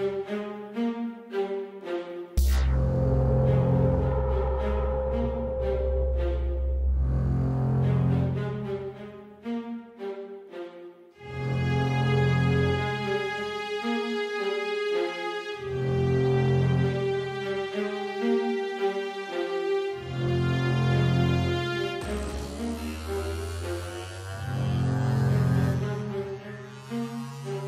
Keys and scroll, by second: 6.1 super+z, 14.2 BackSpace, 15.1 super+d, 20.3 super+a.